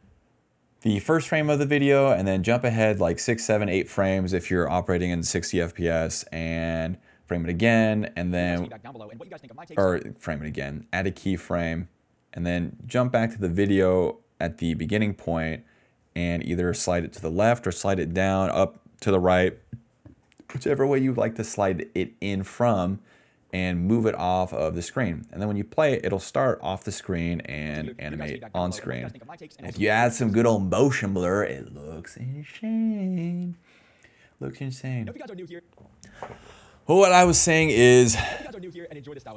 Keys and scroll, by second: 8.2 space, 9.8 space, 11.3 s, 11.5 s, 11.6 s, 12.7 d, 12.8 d, 13.1 d, 16.1 s, 17.3 d, 22.3 space, 22.4 space, 27.4 space, 27.7 d, 28.9 s, 29.6 d, 30.3 space, 34.7 space, 35.5 space, 37.5 s, 37.9 space.